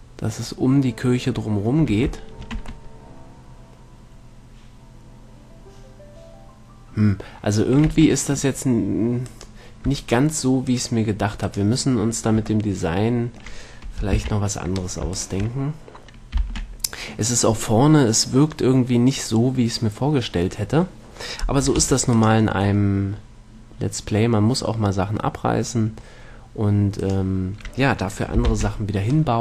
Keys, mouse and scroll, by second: 2.1 a, 2.8 Tab, 8.2 Tab, 9.6-10.9 right drag, 13.0-14.4 middle drag, 14.4 ctrl+l, 16.0-17.2 right drag, 16.7 ctrl+l, 22.1 x, 23.1 middle click, 27.3-29.0 right drag, 28.8 ctrl+l.